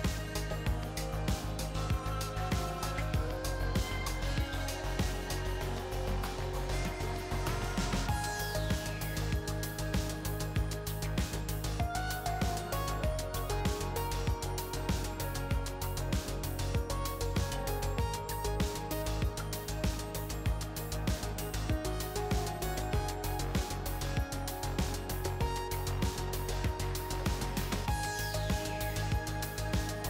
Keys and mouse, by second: 0.0-1.1 drag, 2.7-4.0 drag, 8.5-9.7 drag, 9.9 BackSpace, 10.1 BackSpace, 15.9-18.5 drag, 18.8-20.2 drag, 22.1-23.9 drag, 25.6-26.8 drag, 27.8-29.5 drag, 28.8 BackSpace.